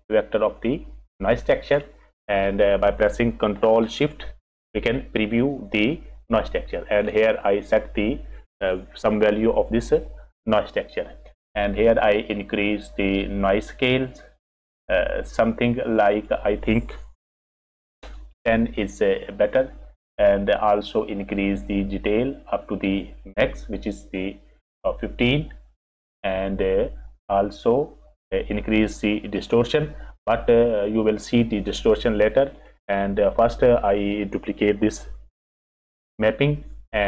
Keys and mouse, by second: 2.4 middle click, 4.5 ctrl+shift+click, 7.7 click, 12.7-16.0 drag, 16.1-19.1 drag, 21.5-23.0 drag, 32.8 click, 34.0 click, 36.1 shift+d.